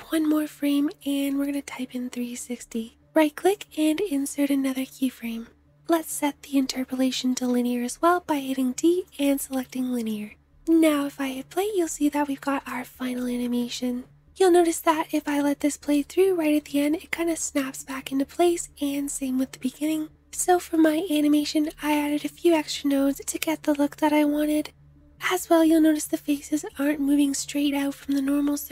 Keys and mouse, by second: 5.8-10.6 drag, 7.1 t, 10.6 space, 12.5-28.7 drag.